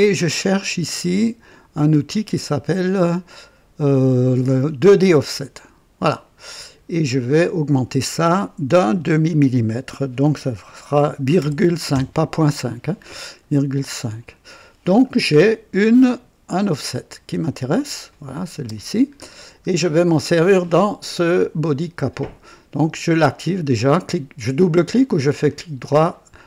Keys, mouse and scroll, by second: 1.7 click, 5.3 click, 7.1 click, 11.3 ,, 11.9 KP_5, 13.9 click, 15.1 scroll down 1, 18.0 click, 18.7 space, 19.2 scroll up 1, 22.4 click, 24.9 right click.